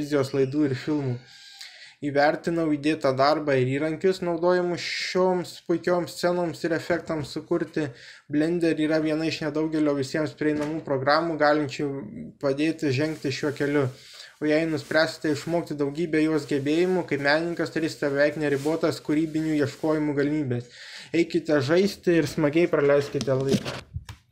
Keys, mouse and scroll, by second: 0.2 KP_0, 1.4-3.7 middle drag, 4.8 Tab, 5.7 BackSpace, 6.0 Tab, 7.5 middle click, 9.1-10.3 drag.